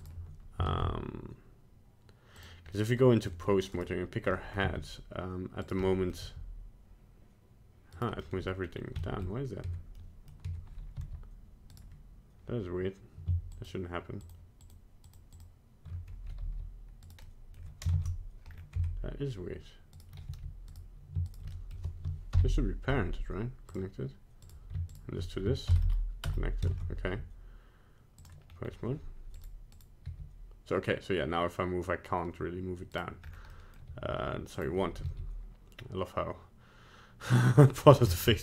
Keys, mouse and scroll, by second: 0.6 ctrl+Tab, 2.8 middle click, 3.2 middle click, 3.8 right click, 4.3 middle click, 4.6 g, 5.8 middle click, 5.8 middle click, 6.2 g, 8.2 middle click, 8.6 scroll down 2, 9.0 shift+middle click, 9.1 middle click, 9.7 Tab, 10.0 middle click, 10.0 middle click, 10.5 Tab, 10.9 g, 13.5 shift+click, 14.2 shift+click, 14.6 shift+click, 15.0 shift+click, 15.3 shift+click, 16.4 g, 17.2 middle click, 17.9 ctrl+Tab, 18.4-18.8 scroll up 2, 18.8 Tab, 19.9 right click, 20.2 g, 21.2 shift+right click, 21.5 middle click, 22.3 ctrl+p, 24.4 right click, 24.9 shift+right click, 25.6 ctrl+p, 26.7 ctrl+Tab, 28.4 scroll down 3, 29.4 right click, 29.7 right click, 30.0 g, 33.2 scroll up 3, 33.5 middle click, 33.8 g, 35.0 g, 37.5 middle click, 37.8 middle click, 38.1 shift+middle click, 38.2 shift+middle click, 38.3 middle click.